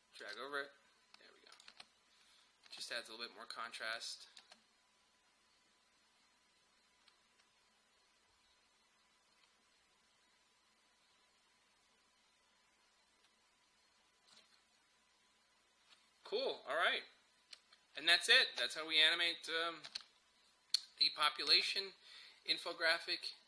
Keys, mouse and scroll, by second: 1.7 space, 4.0 click, 4.4 space, 19.9 space.